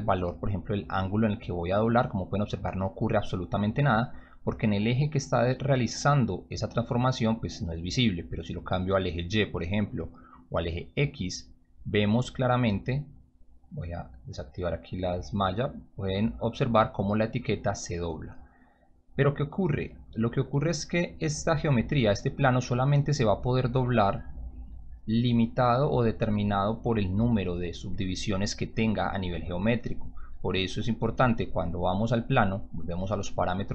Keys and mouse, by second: 8.7 click, 10.8 click, 15.6-18.9 drag, 21.6-24.2 drag, 26.8 click, 32.4 click.